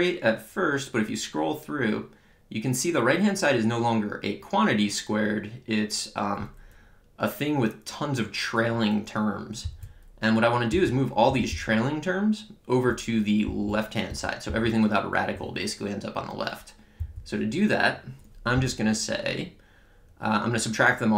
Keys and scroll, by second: 9.7 Down, 10.7 Up, 11.3 Right, 11.5 Left, 13.5 Down, 14.1 Up, 14.5 Left, 17.0 Down.